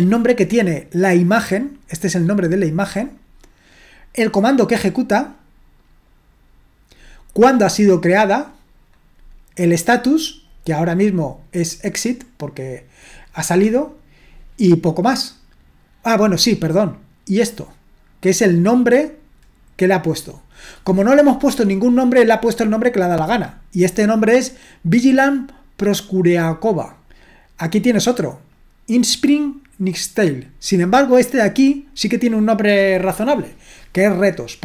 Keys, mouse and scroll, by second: 0.5-3.9 drag, 4.9-13.6 drag, 18.3-21.2 drag, 28.5-30.5 drag, 31.3-32.3 drag.